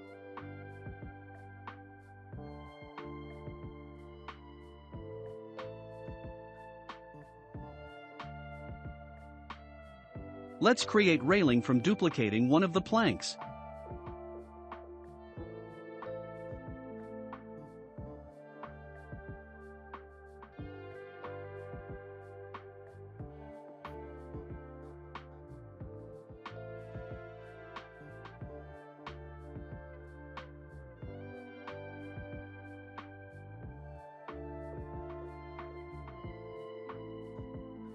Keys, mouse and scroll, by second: 3.6-4.4 scroll up 2, 4.5-7.9 shift+middle drag, 7.9 click, 8.4-9.7 shift+middle drag, 9.7 shift+d, 12.4-13.6 shift+middle drag, 13.6-14.1 scroll up 4, 14.1-15.2 middle drag, 15.2 click, 16.2-16.6 scroll up 4, 16.6-17.1 middle drag, 17.1-17.8 scroll up 2, 17.8-19.5 drag, 22.7 scroll up 2, 23.6-26.0 drag, 23.6 scroll up 1, 26.0 s, 29.0-29.4 scroll down 5, 29.4-31.0 shift+middle drag, 31.0 click, 34.5 ctrl+a, 35.7-36.2 scroll down 2, 36.2-37.9 middle drag.